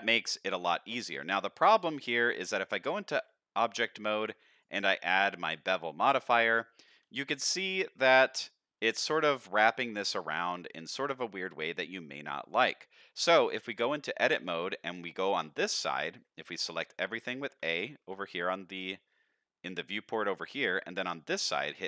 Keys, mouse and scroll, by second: 2.3 Tab, 3.7 click, 4.5-5.6 drag, 8.1 click, 8.3 click, 8.8-9.2 scroll up 1, 9.3 shift+middle drag, 10.3 shift+middle click, 10.7 middle click, 13.5 Tab, 16.2-16.6 scroll down 1, 17.2 a, 17.6 a, 17.9 a, 21.7 a.